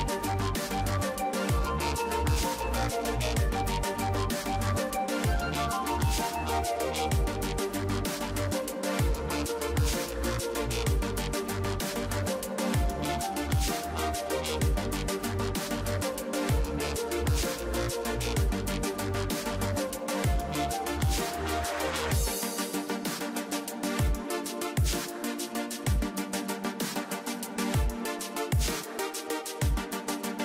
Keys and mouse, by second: 1.7 ctrl+s, 5.8 KP_1, 8.7 a, 10.0 b, 14.3 a, 14.7 b, 16.9 e, 17.8-19.8 drag, 20.0 a, 20.3 b, 21.1-23.2 drag, 22.3 a, 22.6 b, 23.5 KP_3, 24.7-26.6 drag, 28.3-30.4 drag, 29.8 g.